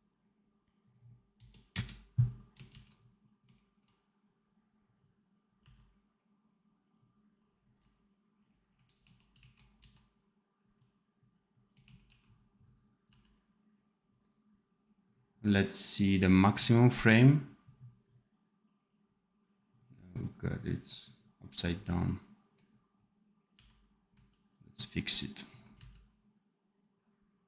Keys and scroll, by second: 2.6 ctrl+z, 5.5 c, 8.9 shift+q, 9.3 shift+a, 9.8 c, 11.5-13.0 typing, 23.4 n, 25.7 c.